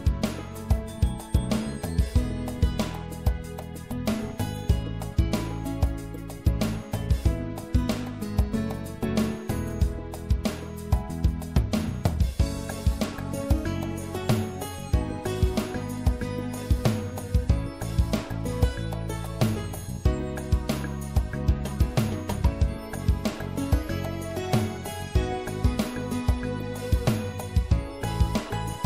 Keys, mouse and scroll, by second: 0.0-2.2 right drag, 3.9-7.3 middle drag, 7.5 e, 8.8-10.6 drag, 10.9-17.5 middle drag, 18.6 s, 24.0-28.8 middle drag.